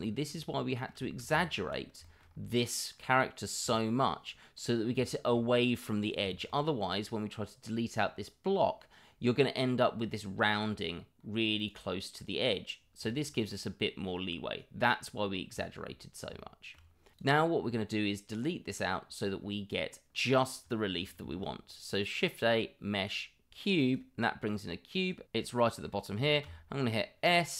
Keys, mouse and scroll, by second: 0.5 middle drag, 2.0 middle drag, 3.7 middle drag, 4.5-4.8 middle drag, 5.0-5.3 middle drag, 6.3 middle drag, 11.6 click, 13.0 middle drag, 15.6 middle drag, 16.3-16.7 middle drag, 17.1 click.